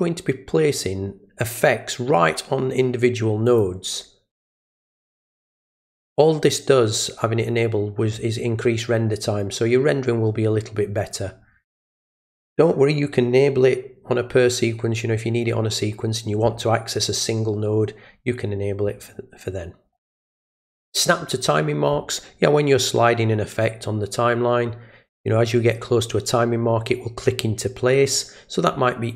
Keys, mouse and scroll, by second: 3.5 click.